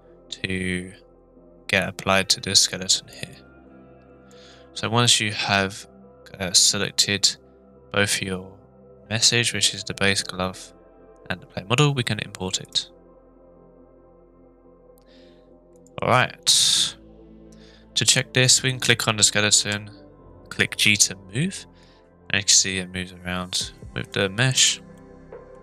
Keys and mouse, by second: 15.7 click, 18.1 click, 19.5 g, 24.0 click, 24.6 click, 24.9 middle click, 25.1-25.5 middle drag.